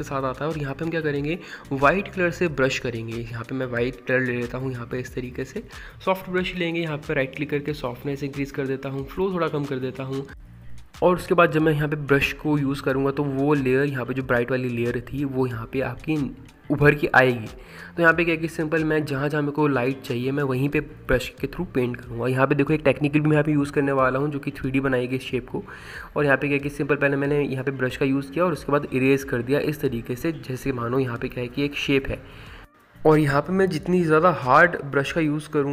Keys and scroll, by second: 0.0-1.2 typing, 3.4 x, 4.9 ctrl+z, 11.8 ctrl+z, 23.4 x.